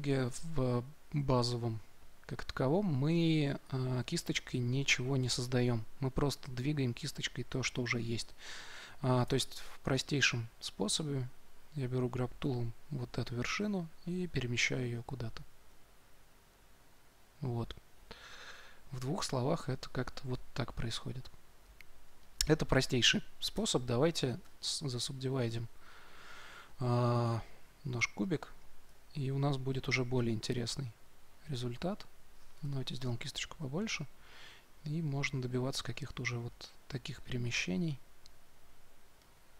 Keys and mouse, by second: 9.2 Tab, 12.8-14.6 drag, 15.6-23.9 drag, 23.5 Tab, 24.4 w, 27.4-29.1 drag, 28.8 Tab, 30.7-32.5 drag, 32.5 f, 33.5-39.5 drag.